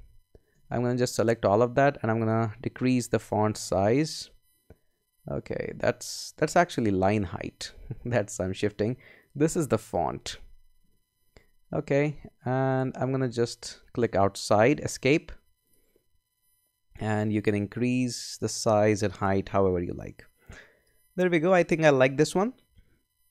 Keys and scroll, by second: 0.5 super+a, 3.1 Down, 5.1 Up, 7.1 Down, 10.1 Down, 11.3 Up, 14.8 Escape, 22.5 Escape.